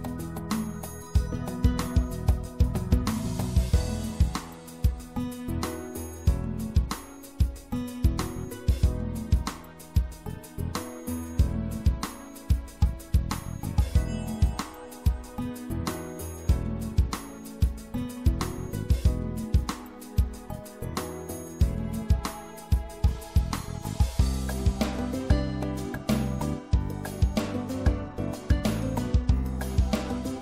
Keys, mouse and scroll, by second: 2.9 i, 3.0 right click, 6.2 right click, 10.1 i, 10.9-12.5 drag, 20.2 e, 21.5-23.1 middle drag, 23.1-25.8 drag, 26.2 middle click, 28.7-30.4 drag.